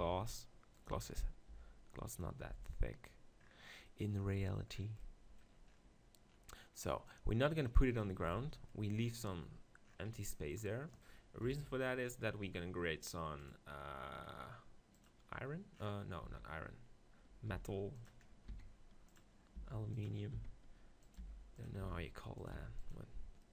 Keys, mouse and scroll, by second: 0.9-3.4 drag, 1.5 z, 1.5 g, 2.4 z, 7.1-8.7 drag, 8.3 ctrl+z, 11.4 KP_1, 13.8-16.2 drag, 16.2-17.7 middle drag, 16.2 z, 17.5 g, 18.5 middle click, 18.5 s, 19.2-23.5 drag, 19.6-22.5 typing, 23.4 right click.